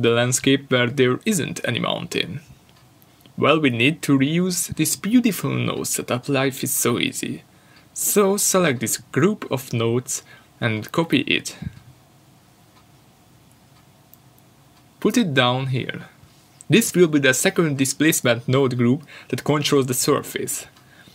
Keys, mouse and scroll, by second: 9.5 shift+d, 11.8 click, 13.0 Delete, 15.7 shift+d, 18.0 g.